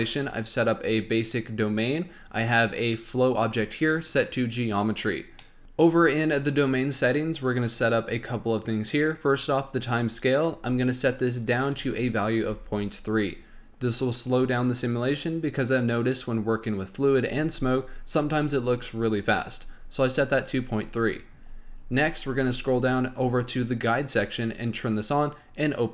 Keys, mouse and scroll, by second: 0.3 click, 2.6 click, 5.3 middle drag, 6.1 click, 10.1-13.1 drag, 21.4-24.7 scroll down 11, 24.7 click, 25.5 click.